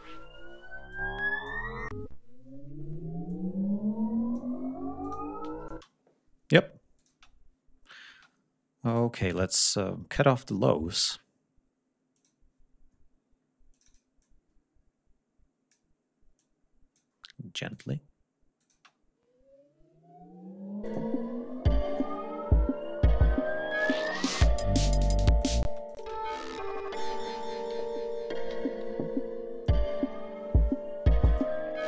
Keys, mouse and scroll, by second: 0.5 click, 2.9-4.2 drag, 4.7 click, 5.3 space, 11.8 click, 13.4 click, 13.8 click, 15.6 scroll down 2, 18.4 space, 20.5 click, 22.0 scroll down 1, 24.5-25.2 drag, 25.3 space, 25.5 click, 27.1 click, 27.5 ctrl+scroll down 1, 28.2 ctrl+g, 29.3 click, 31.3 ctrl+scroll up 1.